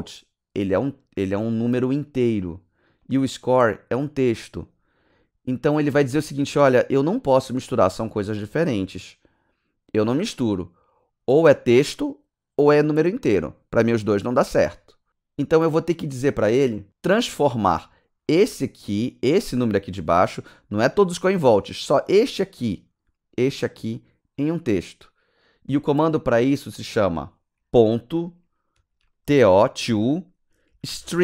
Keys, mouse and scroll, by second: 1.5 click, 1.7 click, 3.0 click, 3.2 click, 3.8 click, 4.0 click, 4.6 click, 18.2 click, 18.5 click, 23.8 click, 24.4 click, 25.4 click, 27.7 ., 29.4-31.2 typing.